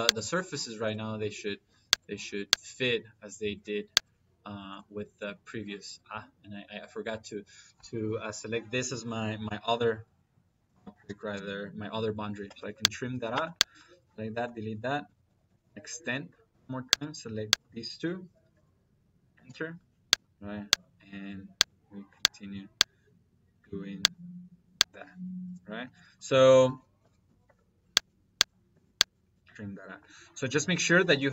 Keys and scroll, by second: 9.3 Escape, 10.5 t, 10.8 r, 10.9 i, 11.2 m, 12.3 space, 13.2 space, 14.3 Escape, 14.9-16.3 typing, 19.6 space, 26.0 Escape, 26.4-27.4 typing, 29.3 Escape.